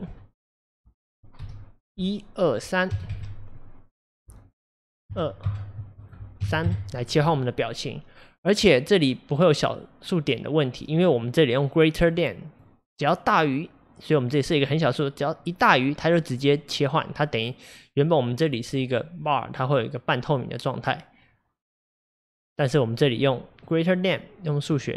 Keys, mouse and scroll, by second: 19.5-24.6 drag.